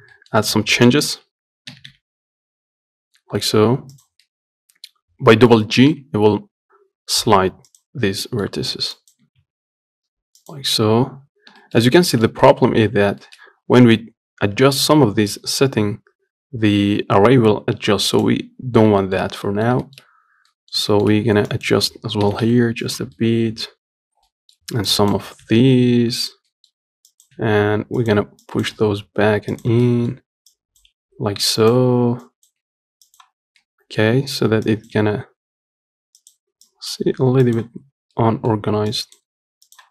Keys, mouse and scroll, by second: 0.2 scroll down 2, 0.4 middle click, 0.6-1.1 scroll up 3, 1.1 shift+middle click, 2.0 g, 4.5-6.0 middle drag, 6.0 g, 8.3 scroll down 1, 8.5 middle click, 9.2 click, 9.5 g, 11.6-11.9 scroll down 2, 11.9 shift+middle click, 12.1 scroll up 1, 12.3 shift+middle click, 13.2 scroll up 1, 13.5-16.2 shift+middle drag, 18.4 click, 19.0 scroll up 2, 19.3-21.8 shift+middle drag, 21.8 click, 22.5 g, 23.5-25.2 middle drag, 25.2 click, 25.7 g, 26.8 middle click, 27.4 click, 27.6 g, 28.7 click, 29.0 g, 30.1 middle click, 30.8 click, 31.2 g, 32.5 click, 32.9 g, 33.9-34.9 middle drag, 34.9 click, 35.2 g, 36.9 click, 37.3 g, 38.1 scroll down 2, 38.4 middle click, 39.2 click, 39.5 g.